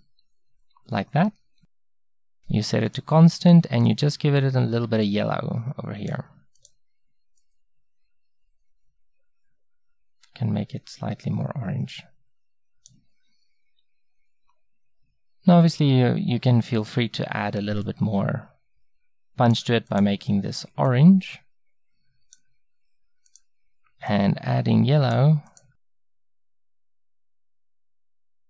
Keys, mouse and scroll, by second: 2.3-12.4 drag, 17.9-19.8 drag, 19.9-21.8 drag, 23.3-27.4 drag.